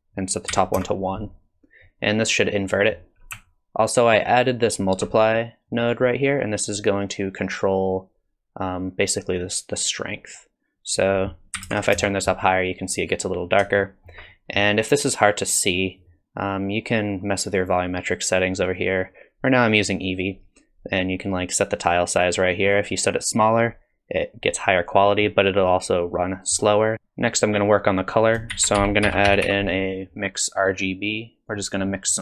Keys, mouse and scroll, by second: 2.7 middle click, 3.4 alt+click, 5.7 click, 10.9 click, 13.8 shift+middle click, 14.3 middle click, 18.3 click, 22.7 click, 26.1 middle click, 26.9-27.8 scroll up 4, 28.1 click, 28.5 shift+a, 31.9 middle click.